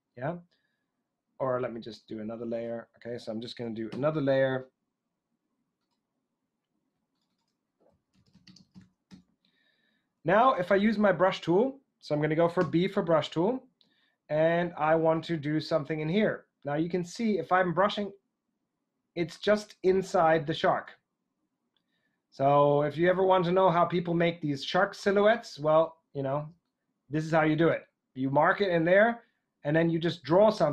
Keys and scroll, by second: 3.8 shift+super+n, 7.6-9.1 typing, 12.6 b.